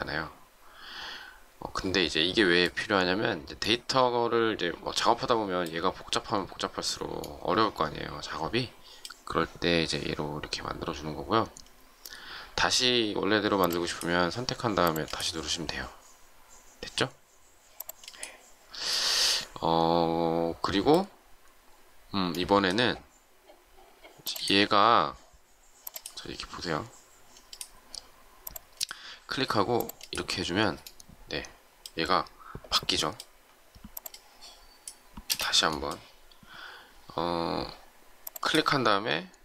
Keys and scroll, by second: 35.2 space.